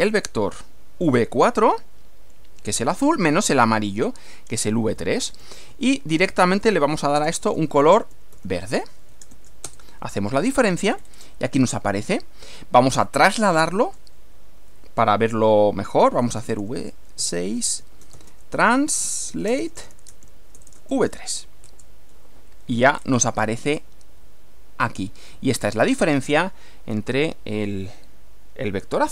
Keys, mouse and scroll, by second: 0.0-1.0 typing, 2.5-4.2 typing, 5.4-9.8 typing, 10.9-11.3 scroll down 2, 12.9 click, 15.8-20.9 typing, 21.7 Return, 22.9-23.3 scroll up 2, 23.7 scroll up 2, 24.8 scroll down 2.